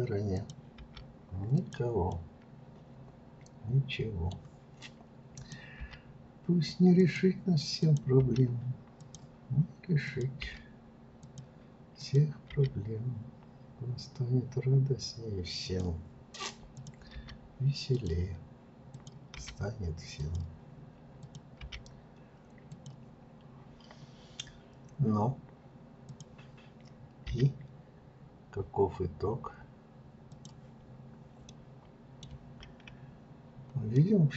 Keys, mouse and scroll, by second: 0.4 click, 0.8 g, 2.1-5.1 middle drag, 5.3 click, 5.8 g, 7.8 click, 8.2 g, 10.1 click, 10.4 g, 12.0 click, 12.5 g, 16.7 click, 17.1 g, 18.9 click, 19.4 g, 21.2 click, 21.6 g, 23.1-26.0 scroll down 2, 26.0 click, 27.3 g, 30.8-31.5 scroll down 1, 31.5-33.1 middle drag, 33.1-33.5 scroll up 2, 33.9-34.3 middle drag.